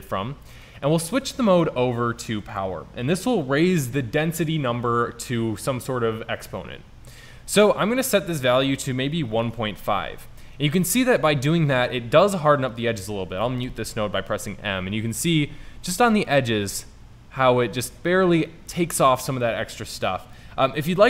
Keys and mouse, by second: 0.7-1.3 drag, 2.5 click, 14.1 m, 16.7 m, 17.5 m.